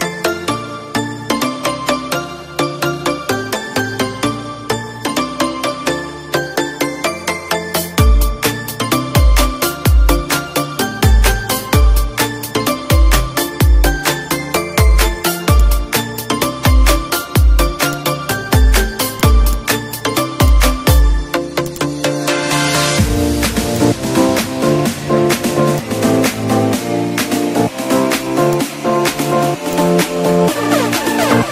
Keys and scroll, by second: 3.0 ctrl+shift+a, 3.9 ctrl+g, 6.7 ctrl+g, 8.9 -, 9.3 space, 16.0 space, 16.6 F4, 18.9 ctrl+z, 21.3 ctrl+shift+c, 23.3 F2, 24.5 Up, 26.4 Right.